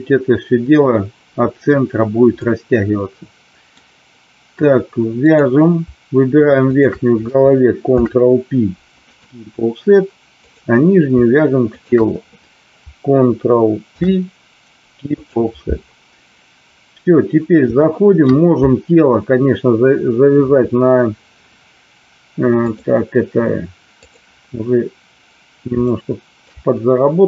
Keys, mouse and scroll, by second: 2.4-3.7 middle drag, 5.1 click, 6.7 shift+click, 7.8 ctrl+p, 10.3 click, 11.6 shift+click, 13.8 ctrl+p, 17.7 shift+middle click, 22.7-24.2 drag, 25.9 shift+middle click.